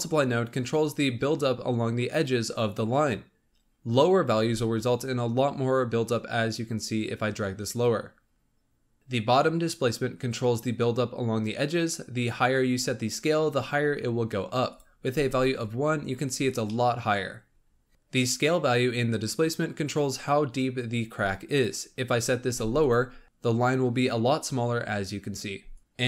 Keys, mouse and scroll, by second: 4.5-7.3 drag, 9.0 click, 15.2 click, 16.3-16.8 scroll down 1, 16.8 middle click, 17.1 middle click, 17.9 scroll up 1, 22.8 click, 23.2-25.8 middle drag, 25.8 scroll up 2.